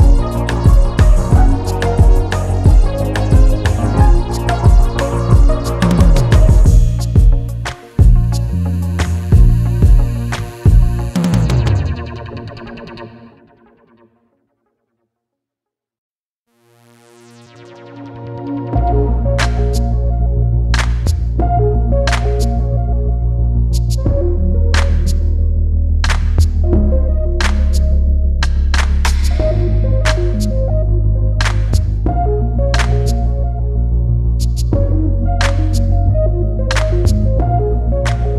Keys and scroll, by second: 32.6 ctrl+z, 34.8 [, 37.1 [.